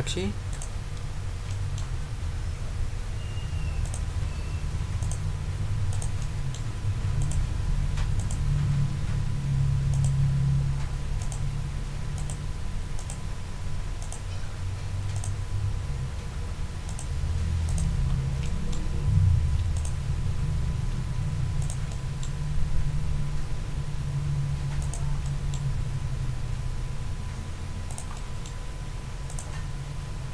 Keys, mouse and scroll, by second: 0.5 click, 1.1 ctrl+scroll down 2, 1.5 ctrl+middle click, 3.8 click, 5.0 click, 5.9-6.7 drag, 6.6 middle click, 7.2 click, 8.2 click, 9.9 click, 11.2 click, 12.1 click, 12.9 click, 14.0 click, 15.1 click, 16.9 click, 17.7 ctrl+click, 18.4 ctrl+middle click, 19.7 ctrl+click, 20.1-20.7 ctrl+scroll up 2, 21.6 click, 21.9 middle click, 22.2 right click, 24.8 click, 25.2 right click, 27.9-28.6 drag, 29.3 click.